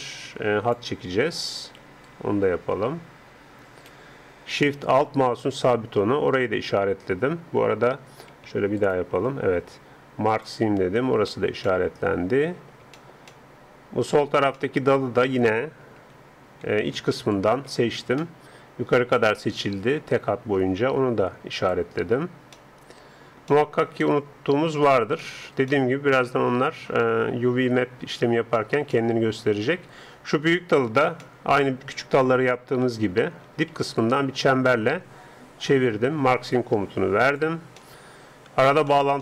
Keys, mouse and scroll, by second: 1.0 d, 1.8 d, 2.0-3.8 right drag, 4.0 d, 5.3-7.1 right drag, 7.9 a, 8.8-10.8 alt+right drag, 10.3-12.2 alt+drag, 12.2-15.8 middle drag, 15.8 a, 16.2 a, 16.6 a, 17.3-19.2 right drag, 21.5-23.5 drag, 22.5 middle click, 23.5-27.4 middle drag, 28.6-30.5 middle drag, 30.8-31.2 scroll up 1, 31.2-32.8 middle drag, 32.8 a, 33.1 a, 33.4 a, 34.0 right click, 34.7-35.9 middle drag, 37.3-39.2 drag, 37.8-39.2 middle drag.